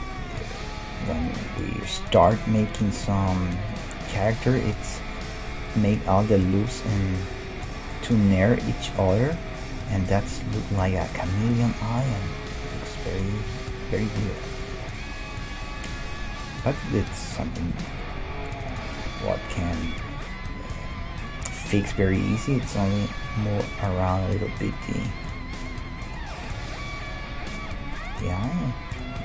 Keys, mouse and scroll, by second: 0.2 g, 3.1-4.1 middle drag, 3.1-6.1 right drag, 4.6-7.0 middle drag, 10.0 g, 12.3 s, 13.0-19.4 right drag, 13.3 g, 13.5 middle click, 14.3-16.3 middle drag, 16.7 g, 18.3 g, 19.4-21.2 middle drag, 20.8 g, 21.2-23.4 right drag, 21.8 g, 23.2 g, 24.1-29.2 middle drag.